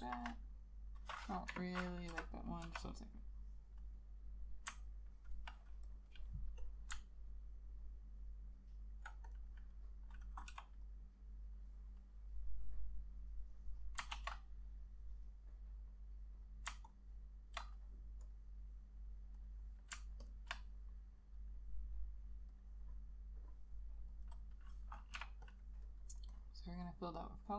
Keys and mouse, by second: 0.2 ctrl+a, 1.6 Delete, 2.2 v, 2.8 b, 4.9 ctrl+click, 8.3 alt+click, 10.6 b, 14.2 ctrl+z, 17.0 ctrl+click, 20.4 ctrl+click, 25.3 k.